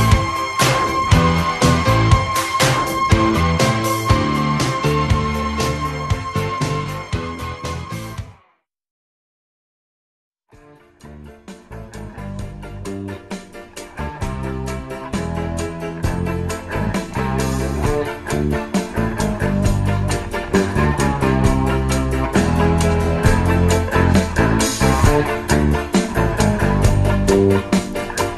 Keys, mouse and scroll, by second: 0.0-5.9 typing, 0.2 alt+d, 1.3 alt+d, 1.8 alt+d, 2.5 click, 2.6 alt+d, 2.8 alt+d, 3.2 alt+d, 3.7 alt+d, 4.1 alt+d, 4.9 alt+d, 5.8 alt+d, 5.8 click, 6.0 alt+d, 6.8 alt+d, 7.0-8.8 typing, 7.1 alt+d, 7.9 alt+d, 8.3 alt+d, 12.4 KP_3, 14.3 KP_1, 16.0 KP_3, 17.9 x.